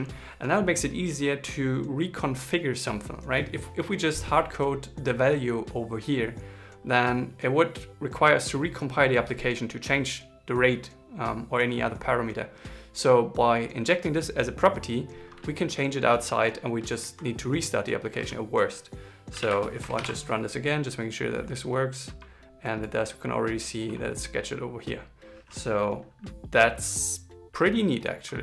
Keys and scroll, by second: 19.7 ctrl+shift+r.